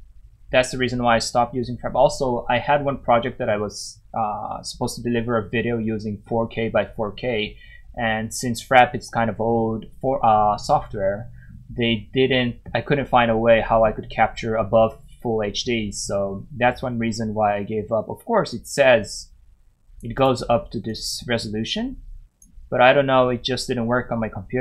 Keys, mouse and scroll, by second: 13.2 scroll up 1, 13.4-14.2 scroll down 1, 16.3 scroll up 1, 18.5 click, 20.2 double click, 20.9 click.